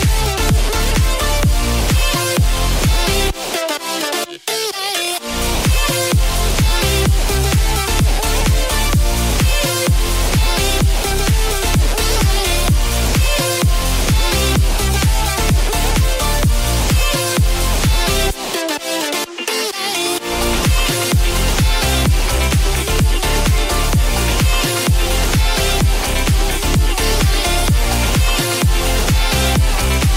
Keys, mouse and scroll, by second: 0.4 click, 3.1 g, 3.1 z, 7.4 click, 9.6-10.0 scroll down 3, 9.9-10.2 scroll up 2, 10.7 shift+click, 11.6-12.6 shift+middle drag, 13.3-17.2 middle drag, 18.4 KP_3, 20.8 click, 21.1-22.9 middle drag, 23.6 Delete, 25.1-26.4 middle drag, 28.3 click, 30.0 alt+shift+click.